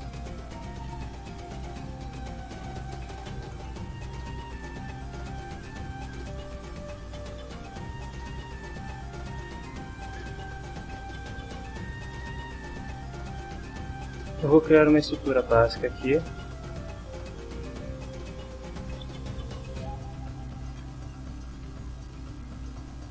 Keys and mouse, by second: 0.6-1.4 typing, 1.7 Down, 2.8 Return, 6.3 click, 15.8 click, 17.2 click, 18.0 click, 19.1 ctrl+s, 20.0-21.3 typing, 21.9 click.